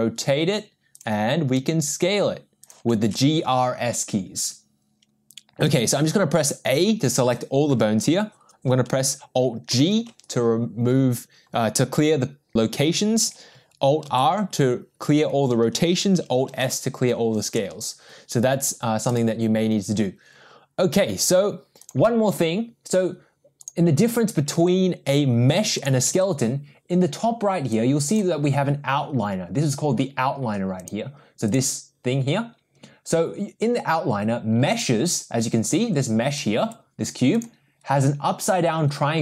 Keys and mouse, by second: 1.7 s, 3.8 ctrl+z, 5.8 a, 9.8 alt+g, 14.3 alt+r, 16.6 alt+s, 19.2-22.0 drag, 23.6 click, 27.7 click, 30.8 click, 34.7 click, 36.6 g.